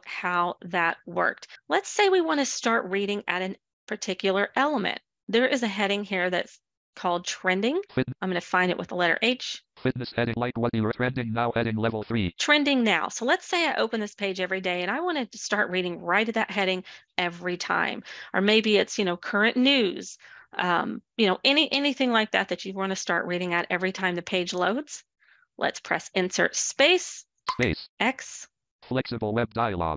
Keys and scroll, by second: 8.2 h, 9.6 h, 24.9 space, 27.8 x.